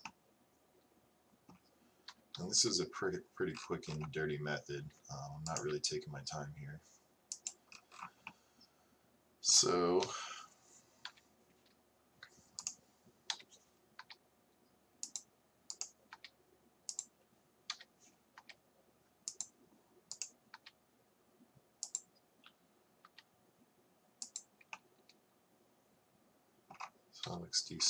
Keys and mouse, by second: 2.1 KP_1, 2.6 KP_3, 5.5-8.3 drag, 10.1 KP_3, 11.1 KP_1, 13.4 KP_7, 14.0 r, 16.2 r, 17.8 KP_1, 18.4 r, 20.6-23.1 drag, 20.6 r, 24.8 middle click, 27.3 KP_3.